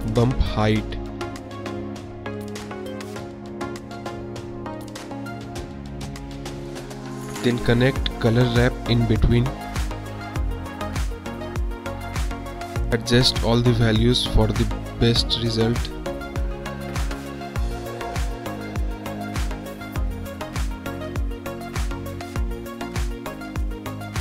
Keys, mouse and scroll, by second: 2.7-3.1 drag, 3.5-4.5 drag, 5.5-5.8 drag, 5.9 click, 7.1 click, 8.3 shift+a, 12.4 middle click, 12.9 middle click, 13.6-15.6 drag, 16.3-19.3 drag, 20.9-22.9 drag, 23.4 click, 23.6 click.